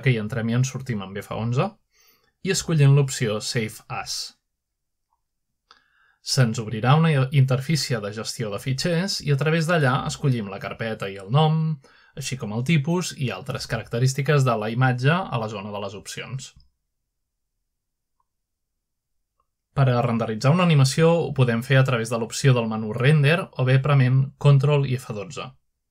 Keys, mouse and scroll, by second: 0.6 click, 2.6 click, 7.5-8.2 drag, 14.2 click, 16.2 click, 18.1 click, 19.1 click, 21.0 click, 22.3-23.3 scroll down 1, 23.3 click.